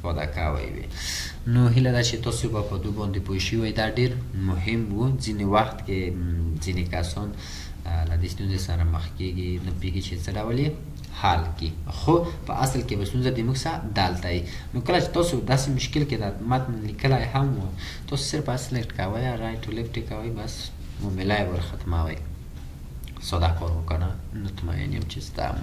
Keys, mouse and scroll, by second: 6.0-6.3 ctrl+scroll down 2, 6.8-7.1 ctrl+scroll down 1, 11.3-11.8 ctrl+scroll down 1.